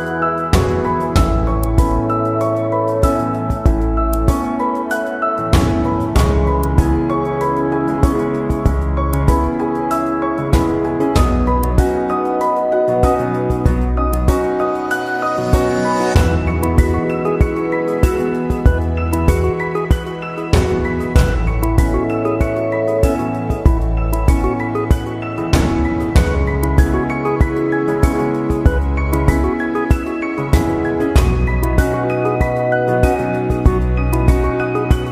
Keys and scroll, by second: 34.3 ctrl+=.